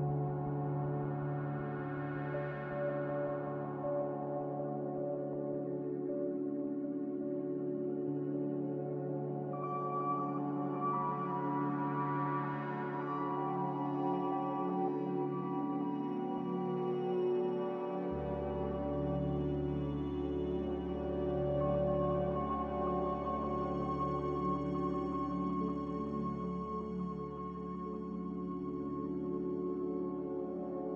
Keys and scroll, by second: 0.0-3.4 typing, 4.8 g, 6.6 typing, 8.1 typing, 8.5 Return, 10.1-13.0 typing, 10.7 Return, 11.7 Return, 15.1 z, 18.0 z, 26.5 c.